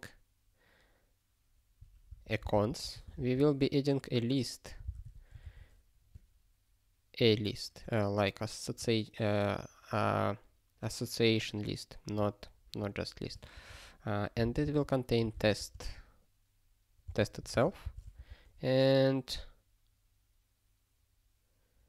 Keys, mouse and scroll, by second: 2.1 ctrl+a, 2.4 Return, 2.7 ctrl+p, 2.9 Tab, 3.1 (, 4.8 ctrl+b, 5.0 ', 5.4 ctrl+f, 13.6 (, 15.3 space, 15.3 ., 15.5 space, 15.8 ,, 17.5 ctrl+f, 17.8 Return, 18.1 (.